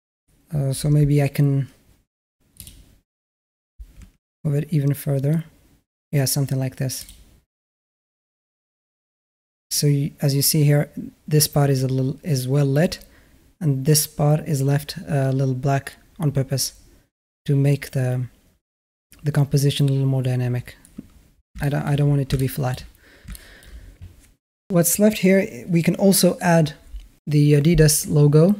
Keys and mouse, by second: 2.5-3.1 middle drag, 3.8 g, 21.4-23.3 typing, 21.4 shift+middle drag, 22.2-22.5 middle drag, 23.2 shift+drag.